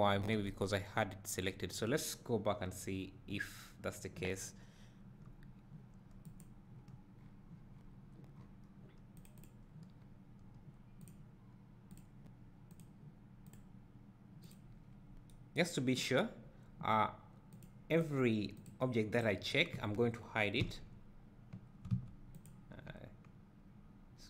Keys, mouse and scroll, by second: 0.5 Tab, 6.3 click, 9.2-9.8 drag, 9.9 scroll up 2, 11.1 click, 11.9 click, 12.7 drag, 14.9 scroll down 1, 17.6-19.2 drag, 20.7 h, 22.5 click.